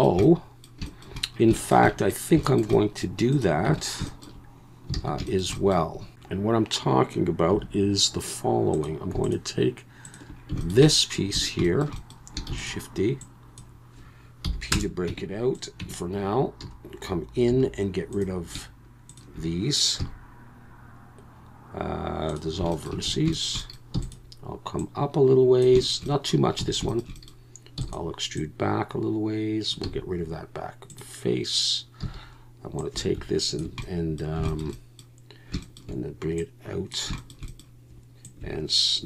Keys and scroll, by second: 3.7 Tab, 5.0 alt+a, 7.5 2, 12.5 shift+d, 14.4 p, 15.1 Tab, 15.8 Tab, 16.6 a, 17.5 1, 20.0 x, 23.3 shift+a, 23.9 e, 26.6 a, 27.8 e, 30.9 x, 32.0 a.